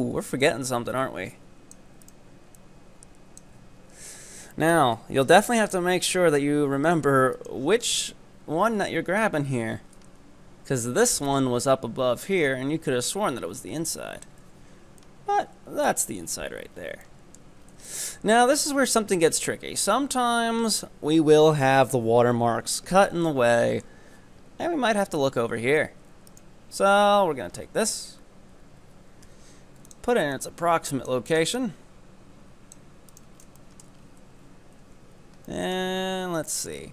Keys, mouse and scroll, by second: 0.5-2.0 drag, 2.0 right click, 2.6 click, 3.6 z, 4.1 Tab, 4.3-4.6 scroll down 2, 4.6-5.0 shift+middle drag, 5.0-5.4 scroll up 5, 5.4 Tab, 5.6-7.4 middle drag, 7.4 right click, 7.9 KP_3, 9.7 z, 13.6 click, 14.5 z, 14.8-15.1 scroll down 3, 15.1-16.3 middle drag, 16.3 KP_7, 16.8-17.1 scroll down 4, 17.1 shift+middle click, 17.7 scroll down 1, 17.9 shift+middle click, 18.4-18.9 scroll up 1, 18.9-21.9 shift+middle drag, 22.4-23.2 scroll down 1, 23.2 scroll down 1, 23.3-26.2 shift+middle drag, 26.4 ctrl+right click, 27.6-28.5 scroll up 4, 28.8 e, 30.4 click, 31.3 right click, 31.7-33.2 drag, 33.2 ctrl+right click, 33.4 scroll down 4, 33.7 middle click, 34.4 z, 35.4 shift+scroll up 1, 35.5 shift+middle click, 36.1 z, 36.6 shift+middle click.